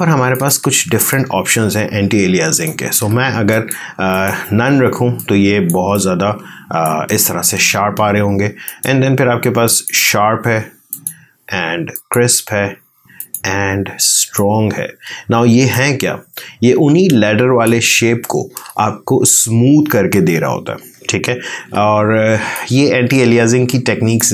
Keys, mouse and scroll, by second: 0.2 click, 0.5 ctrl+space, 1.0 ctrl+click, 1.2 ctrl+space, 3.4 click, 4.9 space, 5.1 click, 5.4 space, 5.8-8.6 ctrl+drag, 15.4 space, 15.6-21.5 ctrl+drag, 21.5 ctrl+space, 22.4-24.3 ctrl+drag.